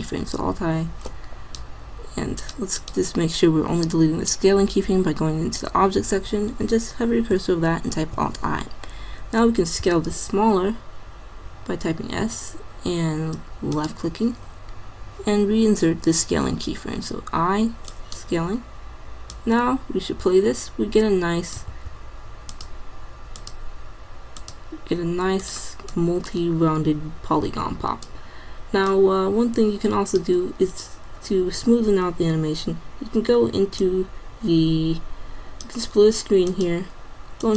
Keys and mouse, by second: 2.4-4.3 drag, 8.0 alt+i, 9.9 s, 17.1 i, 19.4 click, 21.8 alt+a, 27.2 click, 29.0-30.7 drag, 33.8-35.0 drag.